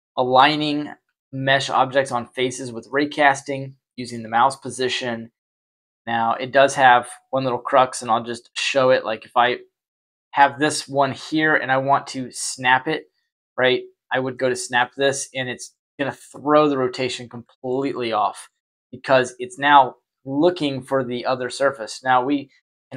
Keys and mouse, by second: 0.3 y, 1.0 y, 1.6 y, 2.1 y, 2.8-4.0 middle drag, 6.2 y, 7.4 right click, 8.4 shift+d, 13.1-13.4 middle drag, 14.3 middle click, 14.7 y, 18.0 Delete, 18.9 right click.